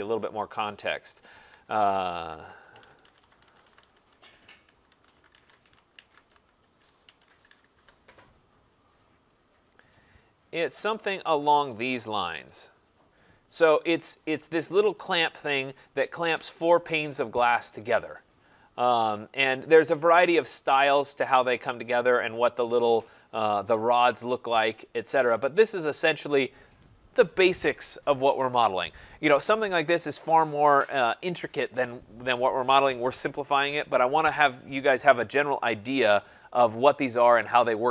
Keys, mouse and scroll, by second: 0.9-5.6 typing, 2.1 click, 7.0-10.7 typing, 12.3-12.8 typing, 13.8 click, 13.8 scroll, 19.0 scroll, 20.8-22.5 scroll, 22.6 click, 22.7 scroll down 2, 36.1 click.